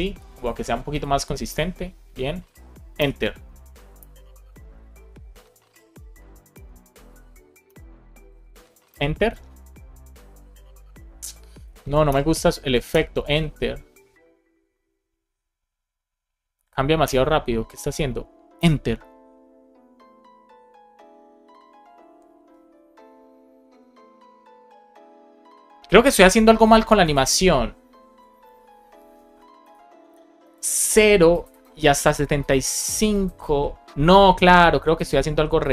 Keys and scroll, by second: 2.8 Return, 3.9 Return, 6.4 Return, 7.0 Escape, 7.5 Return, 8.8 Return, 11.5 Escape, 12.0 Return, 12.8 Return, 16.4 Escape, 16.9 Return, 18.4 Return.